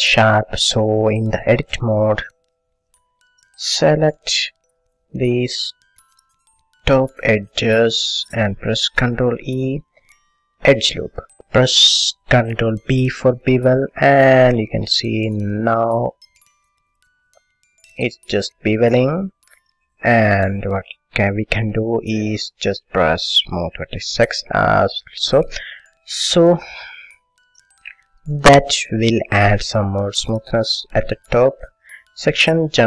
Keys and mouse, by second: 0.5 middle click, 3.0 click, 3.5-4.6 middle drag, 4.6-6.3 drag, 6.3 middle click, 7.0-9.9 drag, 9.3 ctrl+e, 12.8 ctrl+b, 19.7 middle click, 20.9 middle click, 22.3-23.8 middle drag, 23.8-26.4 drag, 26.4 middle click, 27.8 a, 28.4-30.0 middle drag, 30.7-32.8 middle drag.